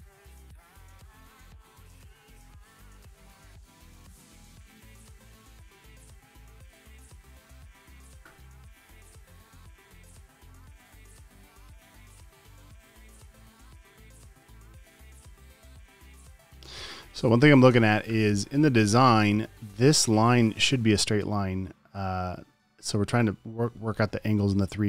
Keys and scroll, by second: 2.5 space, 2.9 space, 8.1 space, 8.4 space, 12.8 space, 13.3 space, 17.6 space, 18.2 space.